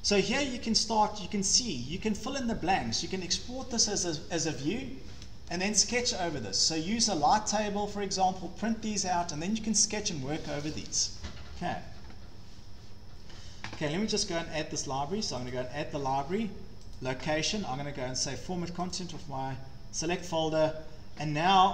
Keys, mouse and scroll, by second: 0.9 click, 1.5 scroll, 3.8 scroll down 1, 11.5-11.9 scroll down 5, 13.2-13.8 scroll, 15.5 click, 17.0 click, 18.9 click, 20.4 click.